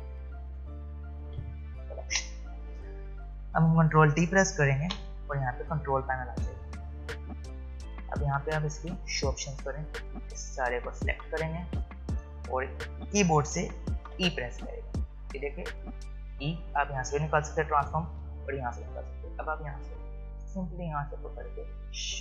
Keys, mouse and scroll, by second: 0.0-1.3 typing, 3.1-4.0 scroll up 1, 4.8 ctrl+t, 6.8-8.3 drag, 10.8 click, 14.1 e.